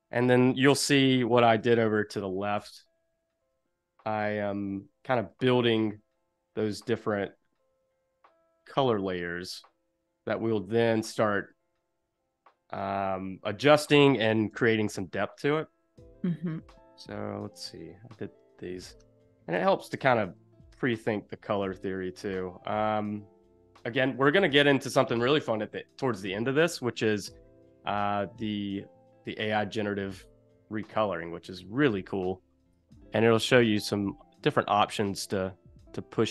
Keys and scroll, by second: 1.1 1, 2.6 a, 3.7 v, 5.9 a, 14.5 i, 18.8 v, 19.5 a.